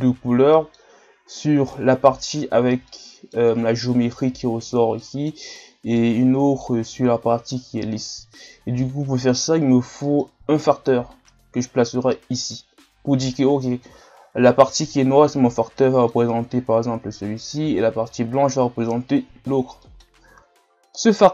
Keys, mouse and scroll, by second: 0.2-0.5 scroll up 2, 0.5-1.4 middle drag, 1.4-1.7 scroll up 1, 1.7-13.9 middle drag, 13.9-14.6 drag, 14.6-15.4 middle drag, 15.4-15.8 scroll down 1, 15.8-21.3 middle drag.